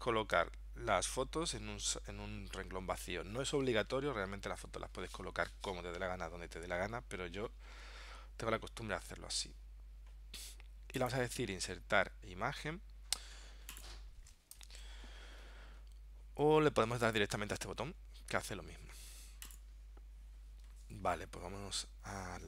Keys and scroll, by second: 14.6 ctrl+alt+super+p.